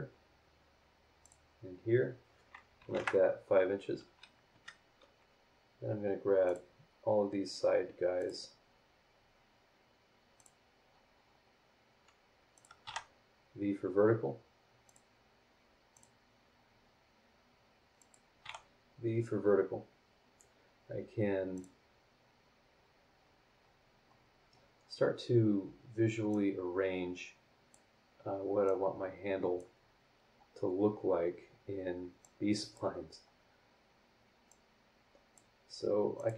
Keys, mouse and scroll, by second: 1.2 click, 1.7 scroll down 2, 2.8 KP_5, 2.9 KP_Enter, 3.5 scroll down 2, 4.2 scroll up 2, 4.5 Escape, 5.7 scroll up 2, 6.4 click, 8.2 click, 8.6 scroll down 2, 9.0 scroll up 2, 10.3 click, 10.8 scroll down 2, 11.1 scroll up 2, 12.5 click, 12.8 v, 14.8 click, 15.9 click, 16.2 scroll down 1, 16.6-17.0 scroll up 1, 18.0 click, 18.4 v, 18.9 scroll down 2, 19.4 scroll up 2, 21.5 click, 23.8-24.3 scroll down 4, 24.4 scroll up 2, 26.3-27.9 drag, 28.6-29.8 drag, 29.8 scroll down 2, 30.2 scroll up 2, 31.0 scroll up 2, 32.2-32.9 drag, 33.1 scroll up 2, 34.5-35.5 drag, 36.1 click.